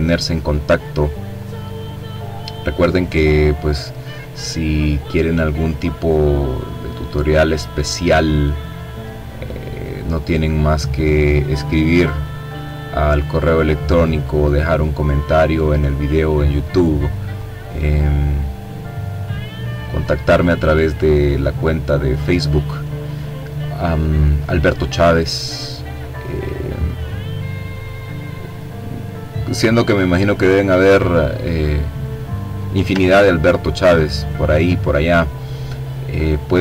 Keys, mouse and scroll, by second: 0.9-2.9 drag, 3.3-8.1 drag, 9.1-10.5 drag, 11.8-14.5 drag, 14.6-16.2 drag, 16.6 click, 17.3-18.5 drag, 23.6 click, 25.8-28.0 drag, 30.4-31.0 ctrl+scroll down 2, 31.2 ctrl+click, 32.3-33.0 scroll up 1, 33.0-33.6 scroll down 1, 33.6-34.7 drag, 35.4 click, 36.5-36.6 drag.